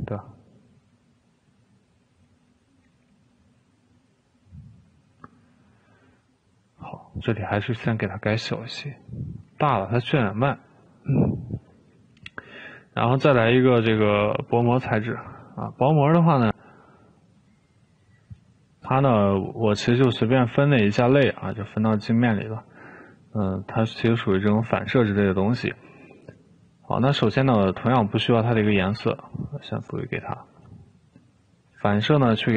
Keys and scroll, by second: 3.3 Escape, 9.9 2.